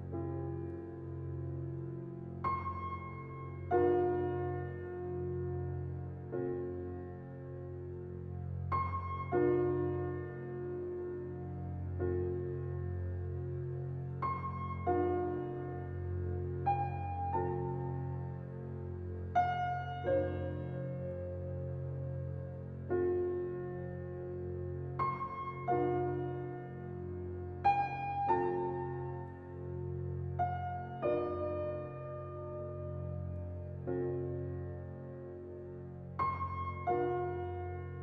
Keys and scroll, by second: 28.8 typing, 34.4 typing.